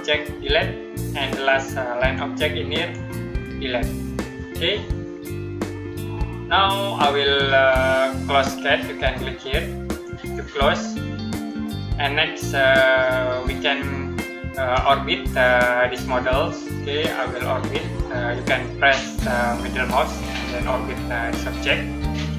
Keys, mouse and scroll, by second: 0.2 Delete, 2.0 click, 3.4 Delete, 4.5-4.8 scroll down 1, 4.8-7.5 scroll up 1, 9.9 scroll up 1, 10.1 click, 16.4 middle click.